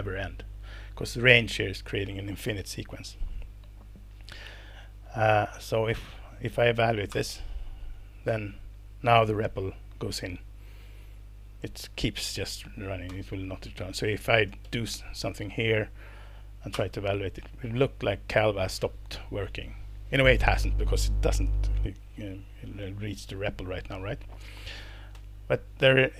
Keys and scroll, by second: 7.1 alt+Return, 13.1 Return, 14.2-15.1 typing, 16.7 alt+Return, 25.1 Up.